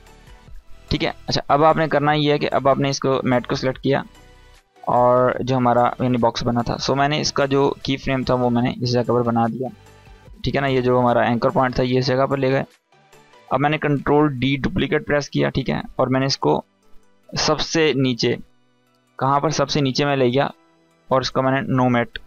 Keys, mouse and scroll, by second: 5.3-5.9 scroll up 1, 8.5 click, 11.8 click, 14.0 ctrl+d, 15.4-17.5 drag, 20.5 click.